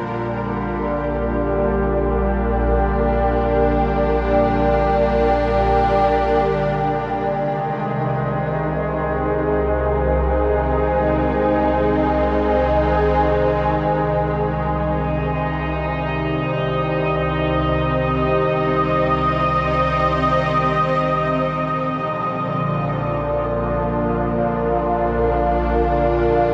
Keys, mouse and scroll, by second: 3.5 scroll down 1, 3.8-5.2 typing, 4.2 click, 4.2 click, 4.8 click, 5.3 click, 7.4 typing, 10.5 alt+click, 12.0 z, 12.2 click, 12.5 z, 12.5 space, 12.7 click, 12.8 z, 13.0 click, 18.5 click, 20.7 ctrl+c, 21.1 click, 22.7 typing, 23.0 ctrl+f, 24.3 click.